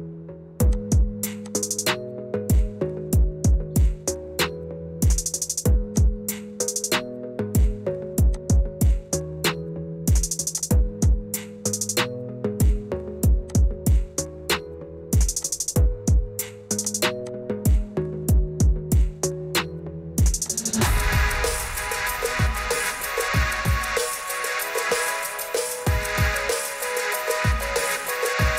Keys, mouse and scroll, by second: 0.8 click, 1.4 click, 2.4-2.8 typing, 4.1 Return, 6.0 click, 7.6 ctrl+r, 8.4 click, 9.3 middle click, 10.6 click, 11.0 click, 11.8 5, 12.6 click, 13.5 click, 14.9 ctrl+r, 15.6 click, 15.8 middle click, 16.9 click, 17.3 click, 18.1 5, 19.1 Return, 20.5 click, 22.4 ctrl+r, 23.0 click, 23.6 click, 25.0 click, 25.4 click, 25.7 click, 26.2 click, 27.0 5, 27.8 Return.